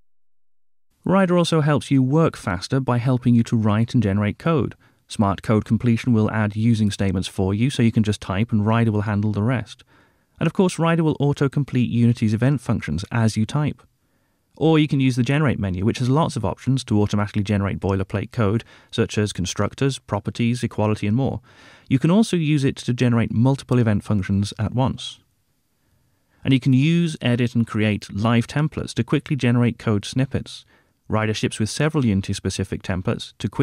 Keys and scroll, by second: 0.5 super+Return, 3.8 Return, 11.4 Return, 13.7 alt+Return, 19.0 Down, 21.7 Up, 22.6 shift+Down, 27.8 Return.